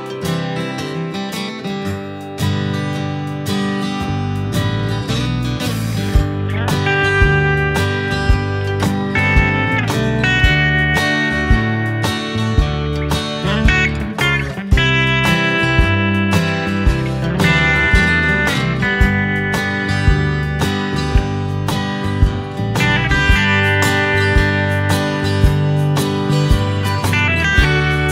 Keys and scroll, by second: 1.7 space, 2.6 space, 11.7 Delete, 15.5 Delete, 17.0 ctrl+c, 17.2 ctrl+v, 23.3 Left, 25.0 ctrl+c, 25.2 ctrl+v.